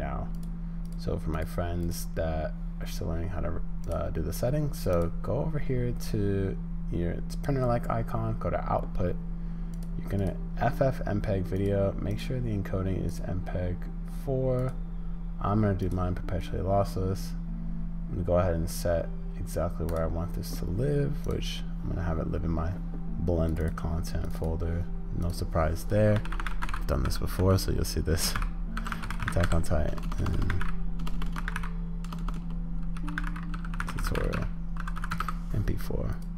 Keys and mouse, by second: 0.4 click.